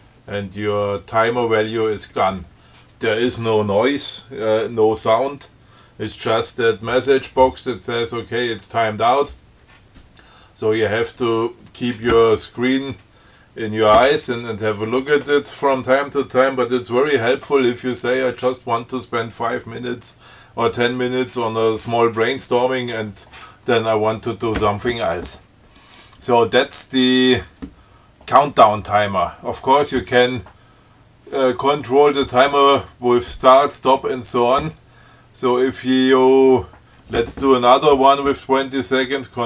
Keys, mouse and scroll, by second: 26.1 click.